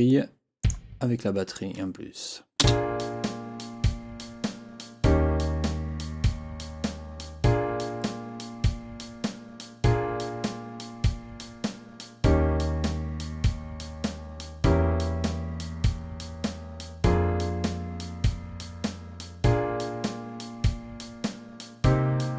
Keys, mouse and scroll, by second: 0.6 click, 2.6 space.